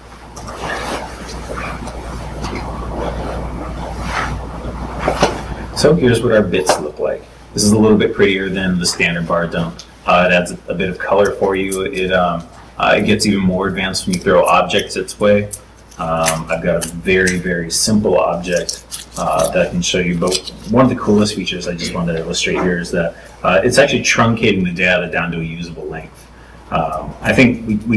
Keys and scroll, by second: 0.6 super+r.